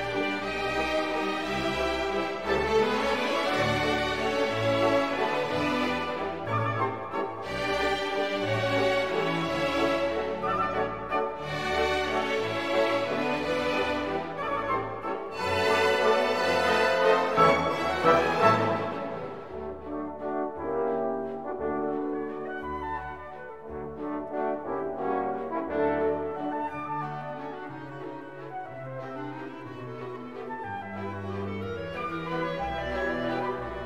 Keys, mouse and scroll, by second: 1.6 click, 3.3 click, 6.4 click, 8.8 click, 11.9 click, 13.7 click, 15.4 click, 17.3 click, 17.7 click, 19.8 click, 20.8 1, 21.1 5, 21.8 click, 22.8 click, 23.8 click, 25.2 click, 25.8 click, 26.4 click, 28.6 click, 29.5 click, 30.1 click.